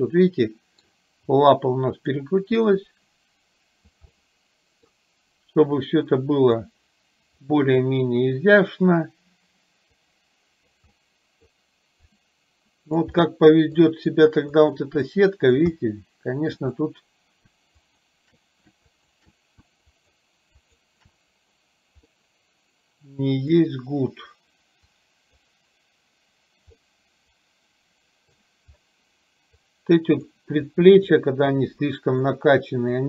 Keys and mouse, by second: 1.4 click, 2.8-4.1 drag, 4.2 middle click, 5.9 click, 7.4 middle click, 10.1 click, 10.9 middle click, 12.2-13.2 drag, 13.3 middle click, 14.6-15.7 drag, 15.8 middle click, 17.9 shift+click, 19.1 shift+click, 20.1 shift+click, 20.6 shift+click, 22.3-23.7 middle drag, 24.9 click, 26.9-28.4 middle drag, 29.7 click, 30.8 click, 31.7 click.